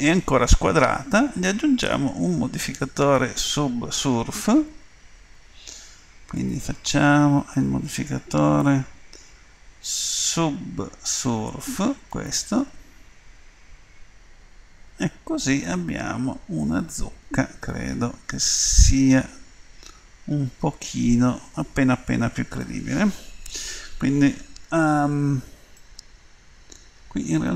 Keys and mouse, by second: 0.6-4.3 middle drag, 6.3-12.3 drag, 15.8-17.0 middle drag, 17.9-19.4 middle drag, 25.9-27.5 middle drag.